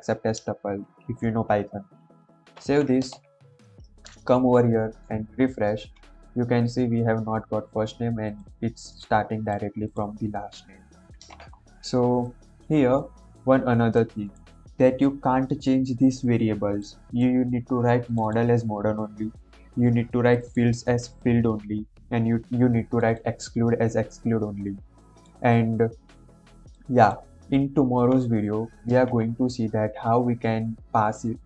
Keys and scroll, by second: 2.5 ctrl+s.